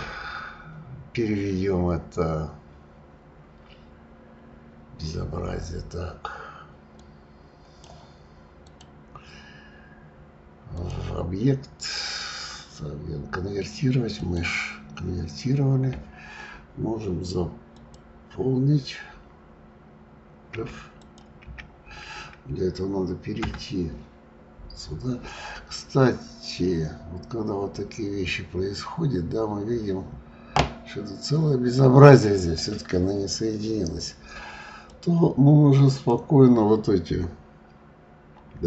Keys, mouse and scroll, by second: 7.0-8.8 drag, 10.7-13.8 drag, 17.7 click, 20.4 f, 20.9 click, 21.3 f, 23.4 Tab, 25.2-25.7 scroll up 4, 26.2-27.0 scroll up 6, 27.0 scroll up 1, 31.7 scroll up 4, 34.8 click.